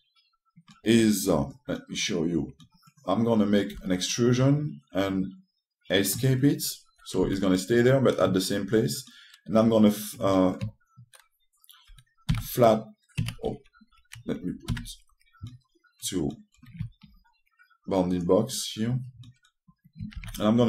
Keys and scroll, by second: 4.4 w, 7.9 s, 13.0 ctrl+w, 15.4 F1.